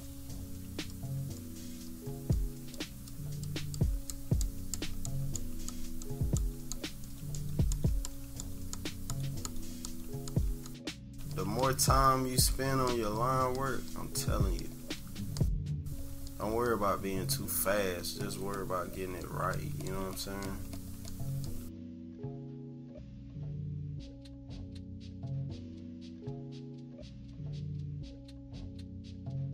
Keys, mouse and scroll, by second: 1.0 click, 2.4 click, 3.1 click, 3.5 click, 3.8 click, 4.5 click, 4.8 click, 5.1 click, 5.4 click, 5.7 click, 6.1 click, 6.4 click, 7.4 click, 7.7 click, 8.1 click, 8.5 click, 8.8 click, 9.1 click, 9.5 click, 9.9 click, 10.3 click, 11.1 click, 11.4 click, 12.5 click, 12.9 click, 13.2 click, 13.6 click, 15.4 click, 15.8 click, 16.5 click, 17.6 click, 18.1 click, 18.6 click, 19.2 click, 19.6 click, 20.2 click, 20.6 click, 21.1 click, 23.4 click, 23.7 click, 24.1 click, 24.4 click, 24.9 click, 26.4 -, 26.5 right click, 26.8 =, 26.8 scroll down 1, 27.0 click.